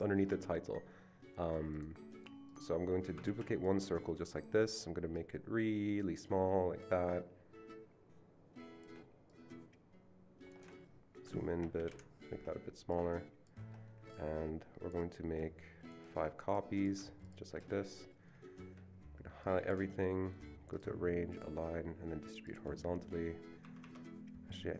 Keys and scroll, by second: 3.3 ctrl+d, 11.8 shift+Down, 11.9 shift+Left, 23.6 Escape, 23.9 Escape.